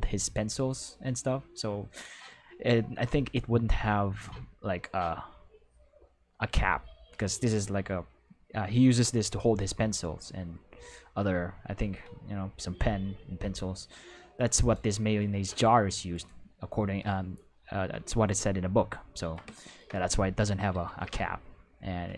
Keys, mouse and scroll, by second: 14.5 right click, 16.1 right click, 18.3-19.3 ctrl+middle drag, 20.8 ctrl+s.